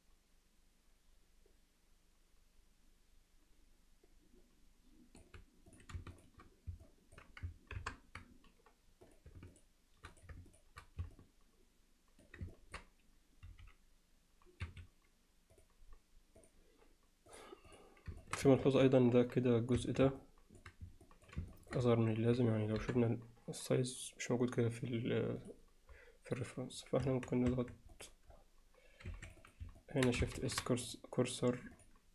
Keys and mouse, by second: 6.9 alt+middle click, 7.8 ctrl+KP_Add, 9.5 click, 10.1 click, 10.6 click, 11.2-12.2 alt+middle drag, 12.5 ctrl+middle click, 13.5 x, 17.3 drag, 17.7 click, 18.2 alt+shift+middle click, 18.6 ctrl+alt+middle click, 19.8 Tab, 20.2 alt+middle click, 21.1 alt+middle click, 21.5 ctrl+alt+middle click, 21.9 middle click, 22.8 KP_7, 29.1 2, 29.4 click, 29.8 alt+middle click, 30.4 shift+s, 30.9 click, 31.8 click.